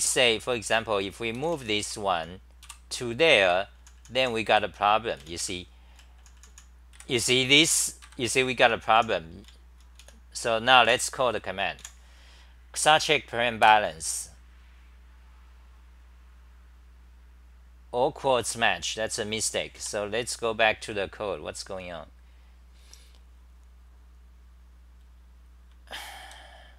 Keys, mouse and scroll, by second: 0.0-10.5 typing, 10.9 End, 11.9 a, 13.6 Return, 19.8 4, 20.8 ctrl+Tab, 25.0-26.7 typing.